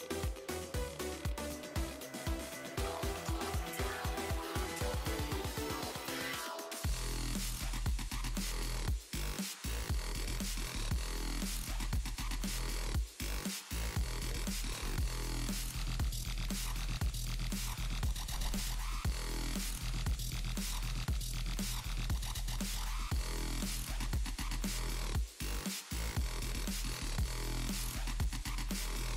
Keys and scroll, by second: 14.1 s.